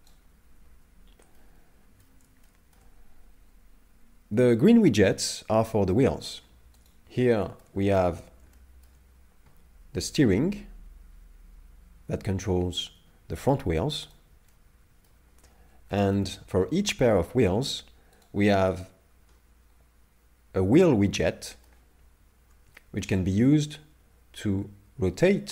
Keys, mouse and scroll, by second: 0.6 ctrl+z, 1.4 middle click, 2.4 shift+middle click, 3.0-3.6 scroll down 1, 6.8 right click, 7.4 shift+middle click, 7.8 middle click, 8.5 shift+middle click, 10.5 g, 14.5 middle click, 15.5 scroll up 2, 15.9 shift+middle click, 18.2 right click, 18.7 middle click, 22.8 shift+middle click, 23.9 r.